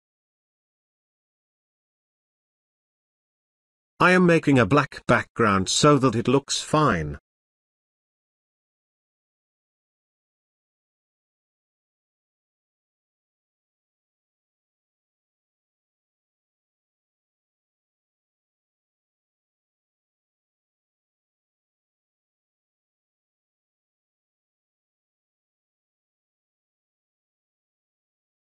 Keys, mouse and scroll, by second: 0.1-1.5 scroll up 1, 1.5-2.4 drag, 5.7 ctrl+z, 7.2-10.0 drag, 15.7 click, 20.9-21.5 drag, 26.8 right click, 28.0 click.